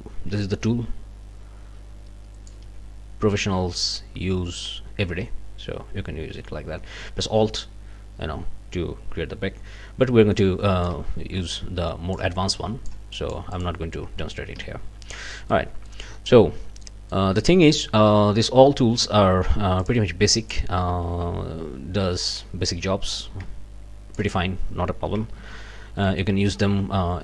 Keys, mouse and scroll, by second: 4.6-11.0 drag, 11.5 click, 12.5 click, 13.1 click, 14.5 Escape, 15.5 click, 16.8 click, 19.8 click, 20.3 click, 21.1 ctrl+z, 22.3 click, 22.6-24.3 drag, 25.4 ctrl+shift+a, 26.1 click.